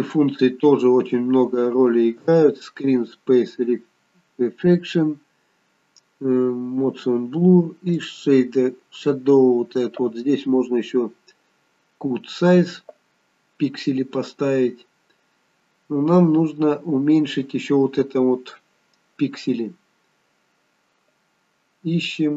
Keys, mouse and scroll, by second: 2.3 click, 8.0 click, 8.6-9.9 scroll down 2, 15.0-17.2 scroll down 2, 17.2-18.0 scroll up 1.